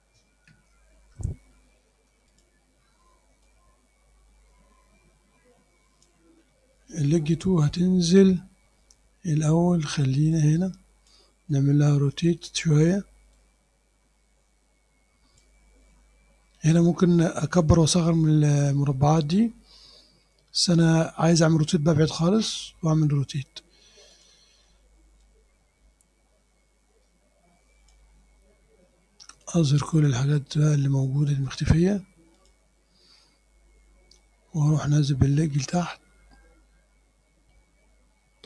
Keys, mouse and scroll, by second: 1.0 ctrl+shift+a, 2.4 click, 3.5-6.3 drag, 6.5 middle click, 10.4 click, 12.2 click, 13.4-15.7 drag, 24.2 click, 25.3-28.2 drag, 29.5 click, 30.0 click, 31.5 click, 32.4 click, 35.5 click.